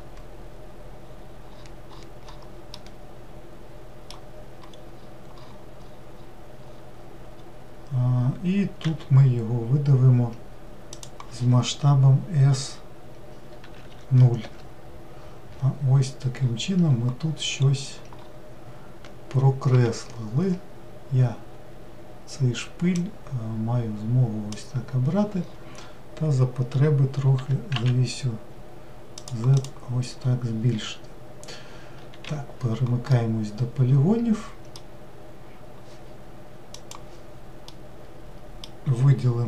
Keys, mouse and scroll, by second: 1.1-2.8 scroll down 15, 2.8-4.8 middle drag, 4.8-6.2 scroll up 11, 6.6-7.4 scroll up 4, 7.4-8.9 scroll up 2, 8.9 e, 16.0-17.6 scroll down 7, 17.6-19.8 scroll up 6, 19.8 1, 23.0 drag, 25.1-26.1 scroll down 10, 27.4 g, 29.6 click, 30.3-32.3 scroll down 5, 32.3 3, 33.2-36.3 middle drag, 37.0 shift+middle click, 37.8-39.4 middle drag.